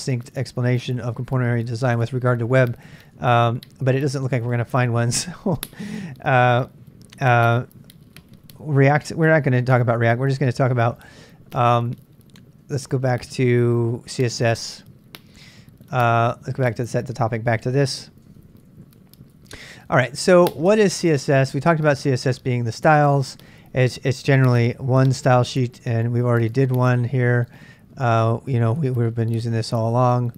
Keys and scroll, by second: 3.3 ctrl+[, 3.4 k, 4.2 ctrl+c, 11.0 ctrl+[, 11.1 k, 12.6 k, 16.7 Return, 18.3 ctrl+[, 18.4 j, 18.5-19.9 j, 20.2 shift+z, 20.5 shift+z, 26.2-30.3 typing.